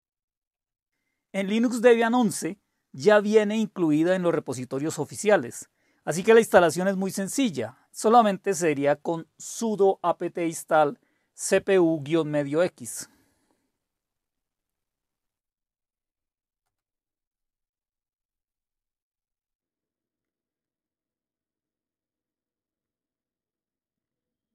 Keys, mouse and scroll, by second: 0.0-0.6 typing, 1.7 typing, 7.0-11.9 typing, 13.4 typing, 16.7 Return, 19.6 Return, 20.0 click, 22.5 click, 24.0 click.